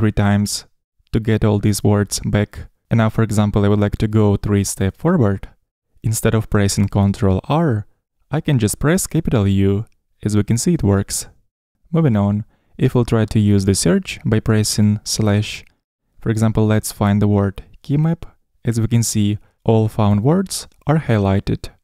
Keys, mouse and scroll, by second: 0.7 u, 1.6 u, 7.6 shift+u, 12.1 u, 12.4 u, 12.6 u, 15.9 /.